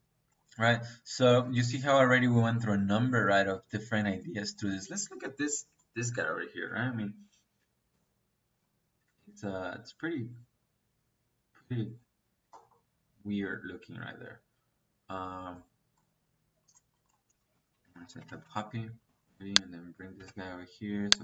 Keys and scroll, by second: 6.2 Escape, 17.2 Escape, 17.6-18.4 typing, 20.1 space.